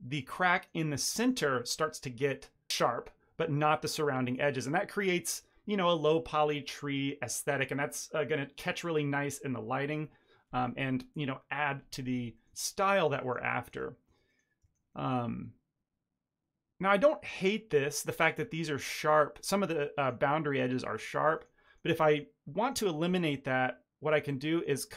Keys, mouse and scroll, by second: 0.1 ctrl+middle click, 1.1 ctrl+middle drag, 3.9 middle click, 12.4 middle click, 13.1 shift+middle click, 13.5 middle click, 14.0 Tab, 14.2 middle click, 14.6 shift+middle click, 14.8 middle click, 15.2 Tab, 15.3 middle click, 17.2 middle click, 18.7 middle click, 19.9 middle click, 20.2-20.5 scroll down 1, 20.5 middle click, 20.9 Tab, 21.3 ctrl+middle click, 21.5 ctrl+middle click, 21.6 middle click, 21.9 shift+middle click, 22.5 middle click, 24.4 ctrl+r.